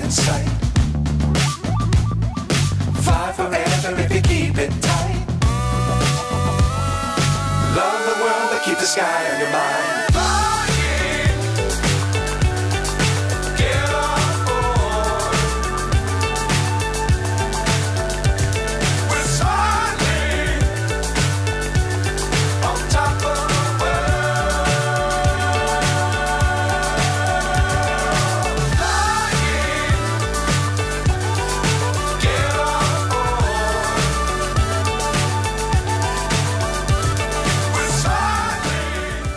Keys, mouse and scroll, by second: 3.3 click, 3.9 r, 7.1 r, 8.5 g, 11.0 g, 13.0 g, 13.2 scroll down 3, 13.4 click, 14.1-14.6 scroll down 2, 14.1 g, 14.4 click, 14.6 scroll up 1, 14.7-15.9 scroll down 2, 16.7 shift+a, 19.2 right click, 20.8 click, 23.2 shift+a, 25.9 s, 26.7 click, 27.7 g, 31.8-32.9 drag, 34.0-35.1 drag, 35.5 g, 36.6 g, 38.0 click.